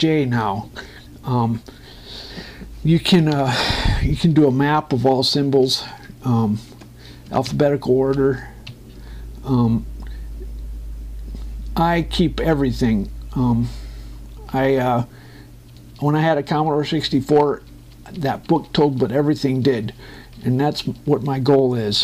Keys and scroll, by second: 4.9 Page_Down, 7.2 Up, 7.4 space, 8.1 Down, 8.2 Up, 9.4 Page_Up.